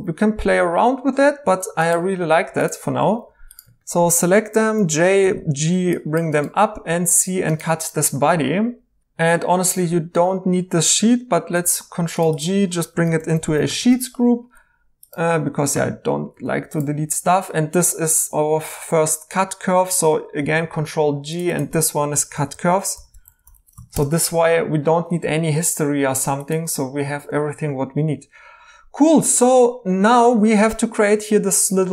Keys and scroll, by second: 3.0 2, 4.7-5.2 typing, 6.8 c, 9.3 Tab, 11.6 ctrl+g, 12.9-13.6 typing, 13.8 Return, 15.5-16.4 typing, 20.4 ctrl+g, 22.1-23.5 typing, 23.9 Return.